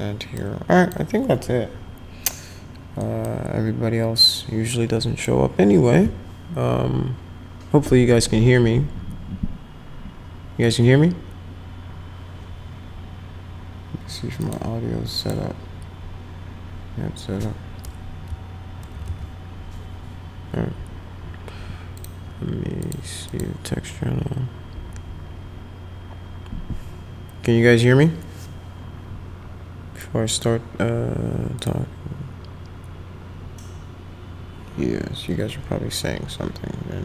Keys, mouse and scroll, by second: 0.4 click, 3.0 click, 4.2-5.2 drag, 14.4 click, 15.2 click, 21.9 click, 22.8 click, 23.3 click, 31.6 click.